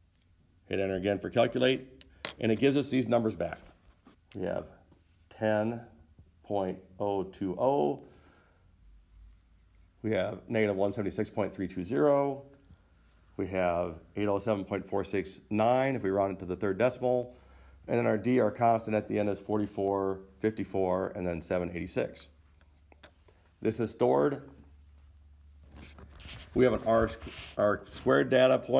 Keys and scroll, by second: 1.3 Return.